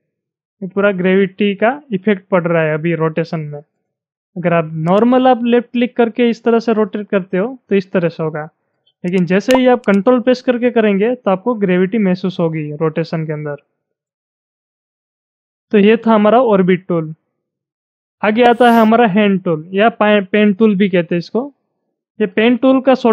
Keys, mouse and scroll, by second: 9.9-16.6 ctrl+drag.